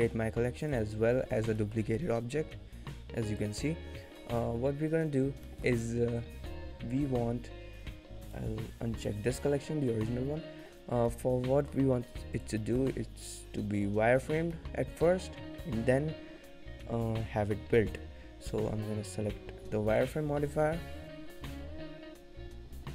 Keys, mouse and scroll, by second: 0.7 click, 1.1-1.6 scroll down 3, 1.8 middle click, 2.3 g, 4.1 scroll up 1, 5.1-5.5 scroll up 3, 5.5 middle click, 8.2 click, 10.8-11.2 scroll down 2, 11.0 middle click, 11.6 middle click, 11.9 g, 12.6 middle click, 14.5 middle click, 17.9 click.